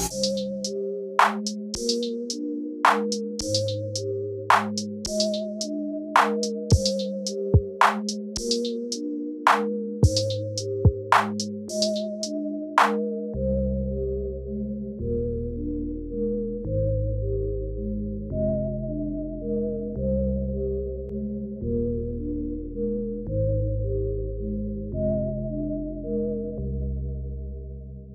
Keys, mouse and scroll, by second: 1.7 middle click, 2.5 click, 3.8 click, 4.8 click, 9.2 click, 10.3 click, 13.7 space, 18.1 space, 19.3 middle click, 21.1 click, 21.7 click, 24.0 click, 24.5 click, 26.6 click, 26.9 click.